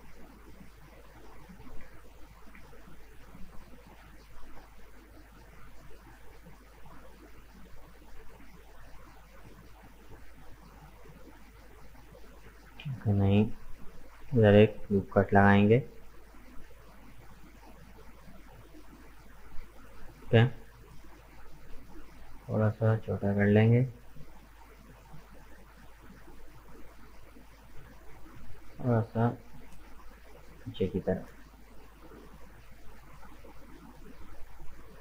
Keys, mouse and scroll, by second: 2.2 alt+shift+right click, 2.7-5.3 middle drag, 5.3 alt+shift+right click, 6.0 middle click, 6.5-6.8 scroll down 2, 6.8-9.5 middle drag, 9.5 s, 11.3-12.6 middle drag, 12.6 ctrl+z, 13.0 middle click, 13.5 right click, 14.7 ctrl+r, 20.2 middle click, 21.1 s, 23.9 scroll down 1, 24.0-26.1 middle drag, 26.1 s, 27.8 g, 30.9-32.8 middle drag, 32.8-33.6 scroll up 2, 33.6 alt+right click, 33.9-35.0 middle drag.